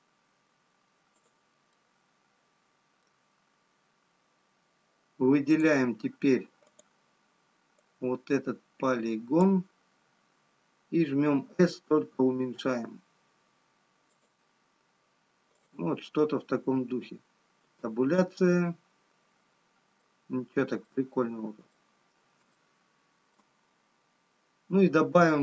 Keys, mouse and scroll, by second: 2.7 middle click, 5.0-6.6 scroll up 2, 6.9 click, 8.7 click, 12.3 s, 15.8 click, 15.8-17.3 scroll down 4, 22.1 Tab, 22.1 middle click, 22.1-22.6 scroll down 1, 23.8 shift+middle click, 23.8-24.3 scroll up 2.